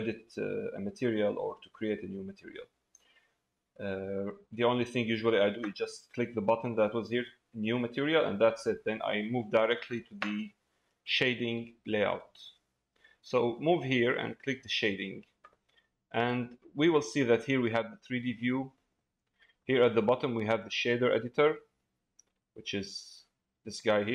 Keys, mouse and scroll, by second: 14.3 click, 16.4 click, 19.3 middle click, 22.3-24.1 drag.